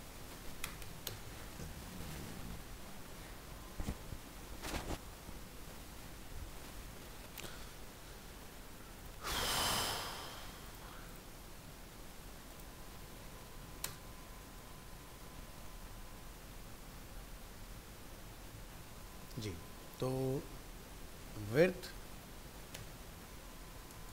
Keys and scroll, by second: 11.8 ctrl+s.